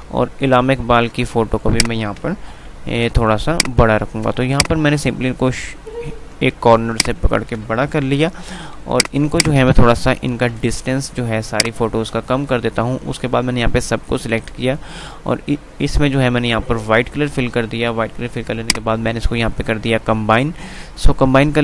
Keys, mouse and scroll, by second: 0.6 click, 1.9 shift+click, 2.6 b, 3.1-7.2 drag, 8.1 b, 8.8-11.8 drag, 11.8-15.2 alt+drag, 18.8 click.